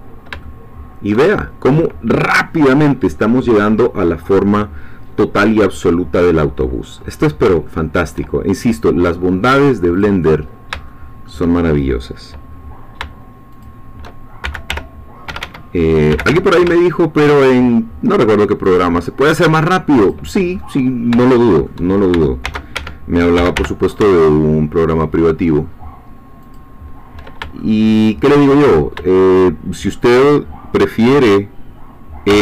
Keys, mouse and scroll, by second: 0.0 shift+scroll down 2, 0.4 shift+middle click, 1.3-3.1 shift+scroll down 3, 3.1-6.9 scroll down 1, 6.9-7.4 scroll up 2, 7.6 shift+middle click, 8.4 shift+scroll up 2, 10.0 click, 10.4-10.9 scroll up 1, 10.9 shift+middle click, 12.4-13.0 scroll down 2, 13.5 shift+click, 14.4 shift+g, 14.7 shift+y, 15.3 Escape, 16.1 g, 16.3 y, 18.6 shift+click, 20.0 click, 20.5-21.1 scroll up 2, 21.2 shift+middle click, 22.4 shift+d, 22.8 shift+Escape, 23.5 y, 26.4 shift+click, 27.6-28.6 shift+middle drag, 28.6 shift+scroll down 1, 28.8 shift+middle click, 29.1-30.1 shift+middle drag, 32.3 e.